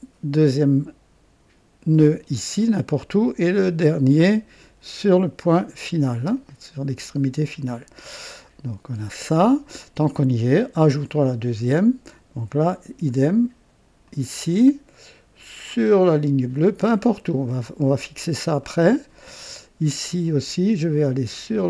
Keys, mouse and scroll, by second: 1.9 click, 5.4 click, 6.4 right click, 10.1 scroll up 1, 10.6 right click, 11.5 scroll up 1, 14.0 click, 16.8 click, 17.6 right click, 18.6 right click, 19.3 right click.